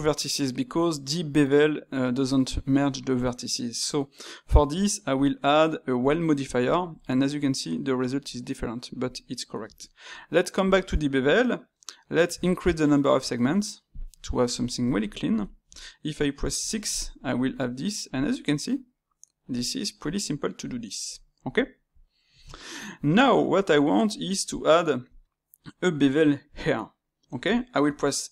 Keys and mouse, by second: 14.2-19.8 middle drag, 21.0-26.7 middle drag, 27.5-28.3 shift+middle drag.